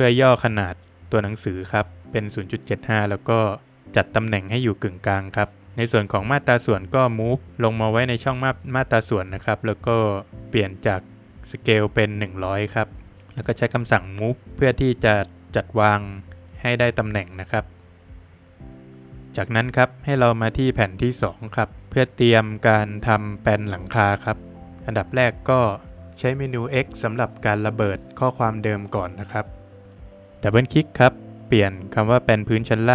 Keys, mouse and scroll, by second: 0.4 Return, 1.0 Escape, 1.2 click, 1.9 scroll up 1, 2.9 space, 3.7 click, 4.0 Escape, 4.3 click, 5.3 double click, 5.6 middle click, 5.6 space, 5.9 click, 7.5 Escape, 7.5 click, 7.5 click, 7.8 double click, 12.5 click, 13.1 click, 13.2 scroll up 2, 14.1 space, 14.4 click, 15.2 click, 15.5 Escape, 15.8 scroll down 3, 16.0 middle click, 16.8 Escape, 17.2 scroll down 1, 17.4 middle click, 19.9 middle click, 23.8 middle click, 24.5-25.4 scroll up 2, 25.0 Escape, 25.4 click, 25.8 middle click, 26.0 middle click, 26.1 click, 26.6 Escape, 26.7 scroll up 2, 27.6 click, 27.9 scroll up 1, 29.4 space, 30.0 scroll up 1, 30.0 Escape, 30.4 click, 30.8 Escape, 31.1 double click, 31.3 click, 31.7 double click, 32.3 double click.